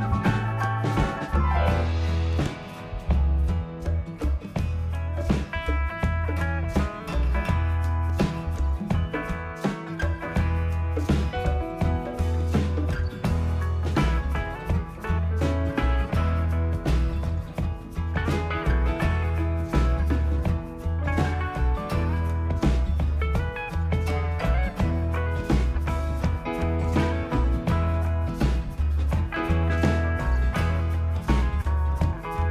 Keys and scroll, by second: 19.7-20.7 typing, 24.3 1, 25.6 0, 27.8 1, 29.0 5.